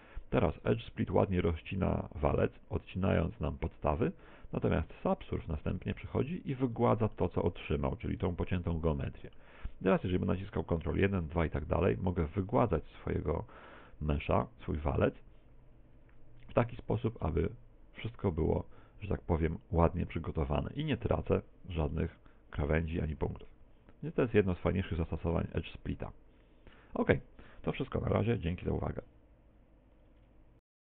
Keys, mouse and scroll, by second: 7.2 middle click, 10.1 ctrl+1, 11.0 ctrl+2, 11.6 ctrl+3, 12.6 middle click, 13.2 middle click, 13.9 middle click, 14.7-15.8 scroll up 9, 15.8 ctrl+3, 16.1 ctrl+2, 16.6 ctrl+1, 17.2 middle click, 18.6 ctrl+2, 18.9 ctrl+3, 19.2 ctrl+4, 20.1-20.8 scroll down 11, 21.9 middle click, 25.0 shift+middle click, 26.0 middle click.